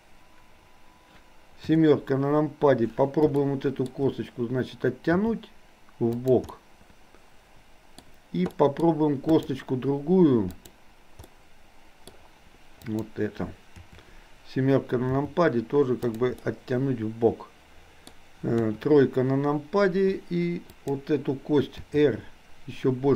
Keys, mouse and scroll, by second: 3.4-3.9 shift+middle drag, 5.3 r, 6.6-8.0 middle drag, 8.6 middle click, 9.4 click, 10.6 click, 11.3 middle click, 13.0 click, 13.8 KP_7, 15.1 r, 16.5-18.1 middle drag, 18.6 KP_3, 20.6 click, 21.9 r.